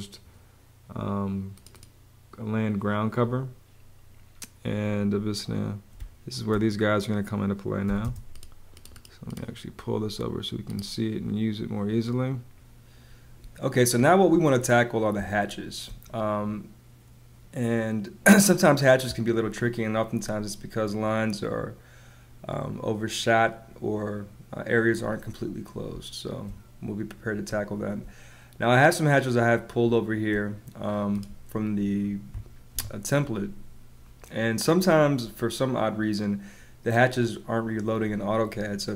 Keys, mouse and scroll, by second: 5.8 space, 7.7 m, 7.9 space, 13.3 space, 15.1 space, 25.8 space, 27.4 space, 29.8 space, 32.7 Escape.